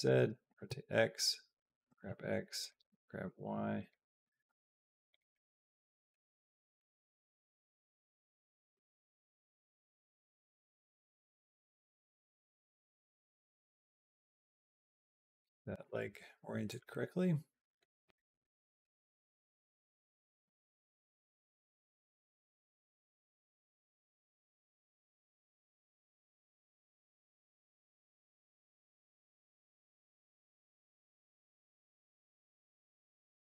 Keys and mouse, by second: 0.3 r, 1.7 g, 2.8 g, 4.0 g, 5.2 middle click, 6.3 middle click, 7.8 click, 8.1 middle click, 8.5 r, 9.3 g, 10.6 middle click, 11.6 g, 13.6 g, 14.9 middle click, 16.0 g, 16.8 middle click, 18.0 shift+middle click, 18.3 middle click, 19.4 shift+middle click, 20.6-25.7 drag, 26.1 b, 27.6-28.7 right drag, 29.2-33.4 drag.